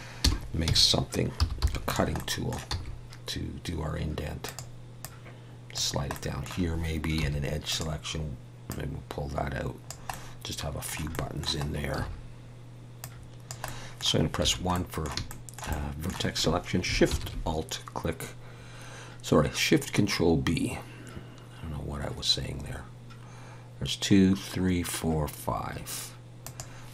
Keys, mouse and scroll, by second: 0.2 r, 2.1 middle click, 2.7 s, 5.0 click, 6.1 middle click, 7.2 2, 7.7 click, 10.1 middle click, 11.6-11.9 scroll up 3, 11.9 a, 13.0 click, 13.6 middle click, 14.4 1, 14.7 middle click, 15.3 shift+middle click, 15.7 middle click, 17.1 ctrl+shift+b.